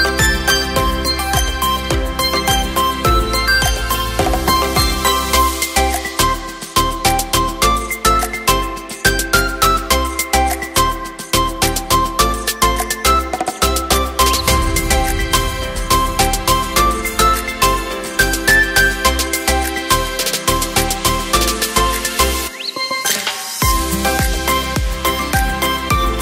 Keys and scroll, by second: 14.5 KP_4, 16.0 KP_8, 20.4 KP_3.